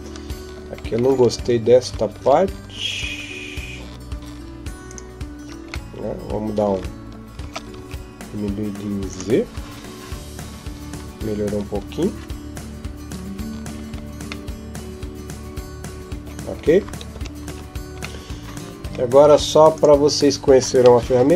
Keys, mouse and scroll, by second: 0.5-1.1 scroll up 5, 1.0 Tab, 2.0 ctrl+Tab, 4.7 alt+right click, 5.7 middle click, 7.2 s, 12.8 F12, 12.8 Escape, 13.5 scroll up 1, 13.6-13.9 scroll down 1, 14.3 middle click, 14.3 scroll up 2, 16.1 scroll up 1, 16.3-16.7 scroll down 3, 17.3 Tab, 18.0 middle click, 18.7 scroll down 1, 19.0 ctrl+s.